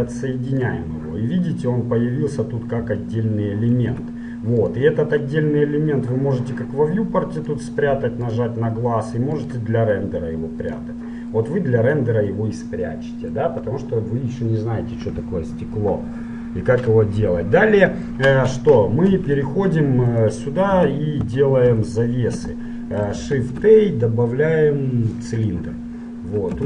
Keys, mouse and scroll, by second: 4.1 Tab, 4.8-6.7 drag, 7.6-11.5 drag, 11.5-13.2 middle drag, 16.2-18.9 middle drag, 19.2 Tab, 20.3-22.1 right drag, 20.9 Tab, 21.7 KP_7, 22.7-24.3 middle drag, 23.5 shift+a.